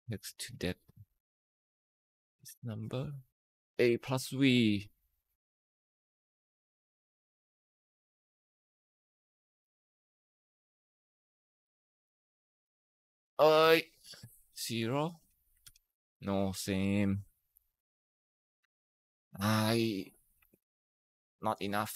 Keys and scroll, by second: 3.5 Escape, 12.5 ,, 14.4 0, 15.4 ctrl+Return, 16.4 typing, 20.4 ctrl+shift+Right, 20.7 ctrl+shift+Down, 21.2 ctrl+c.